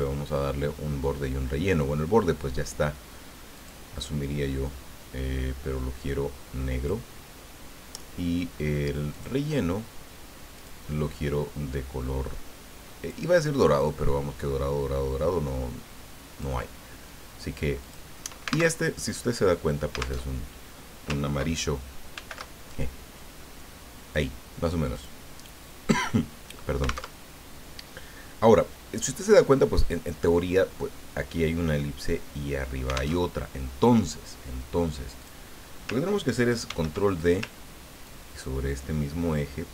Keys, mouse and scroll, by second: 3.5 click, 6.1 click, 9.1 click, 10.5 click, 11.7-13.3 drag, 13.4-16.6 drag, 17.8 click, 18.7 alt+Tab, 20.3 alt+Tab, 22.1 ctrl+shift+f, 23.5 click, 25.0 click, 27.2 alt+Tab, 33.2 alt+Tab, 35.2 click, 36.6 ctrl+d, 38.0-39.7 ctrl+drag.